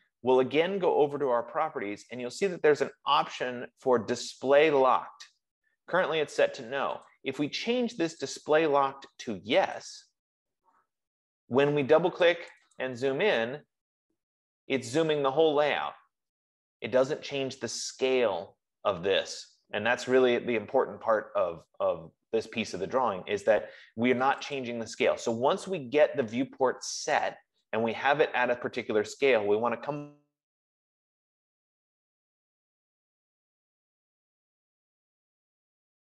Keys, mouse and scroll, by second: 7.4 click, 8.7 click, 10.2 click, 12.8 click, 13.1 click, 13.8-14.1 scroll, 14.6 scroll, 15.5-15.8 scroll, 17.0 middle click, 17.4-18.2 scroll, 18.9-19.2 scroll, 19.5-19.9 scroll, 23.7 middle click, 24.8 click, 25.0 click, 27.5 click.